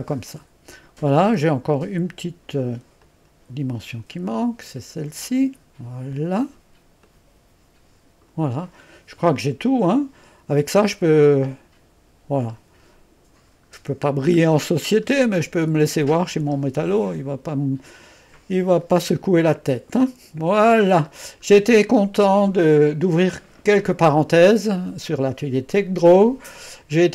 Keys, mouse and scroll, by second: 0.0-0.3 scroll down 2, 3.1 click, 5.2 click, 6.1-10.8 drag, 11.2-14.0 middle drag, 15.0 scroll down 2, 15.9-21.2 middle drag, 21.2-21.6 scroll down 2, 21.9 middle click.